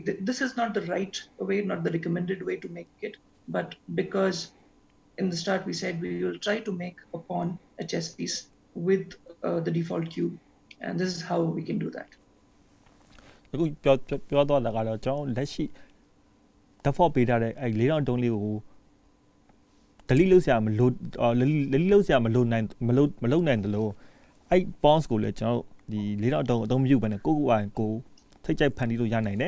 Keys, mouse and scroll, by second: 10.9 middle click, 27.7 click, 28.2 click.